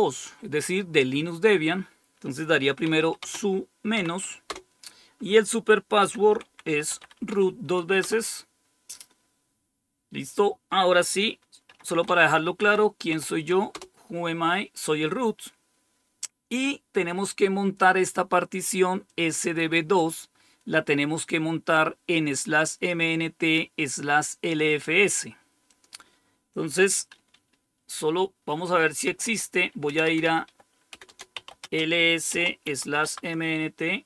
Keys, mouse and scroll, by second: 2.7-3.9 typing, 4.4 Return, 5.7-8.4 typing, 11.3-13.6 typing, 19.0 click, 25.6 click, 28.9-33.4 typing.